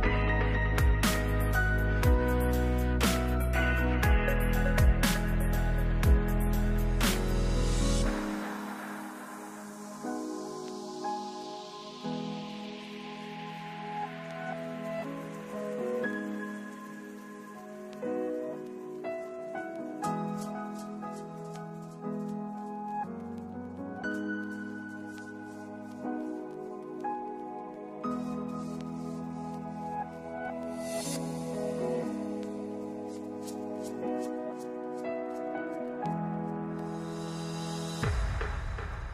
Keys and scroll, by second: 1.6 ctrl+z, 3.5 ctrl+z, 4.6 s, 9.2 r, 18.9 F4, 32.9 F4.